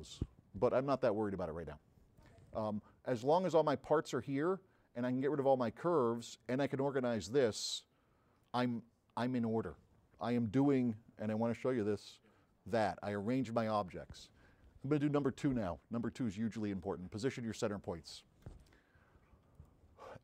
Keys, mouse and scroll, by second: 2.5 right click, 3.6 middle click, 4.0 middle click, 4.7-6.3 right drag, 7.2 middle drag, 7.8 click, 7.8 s, 9.1 middle click, 12.0-15.0 middle drag, 19.6 click.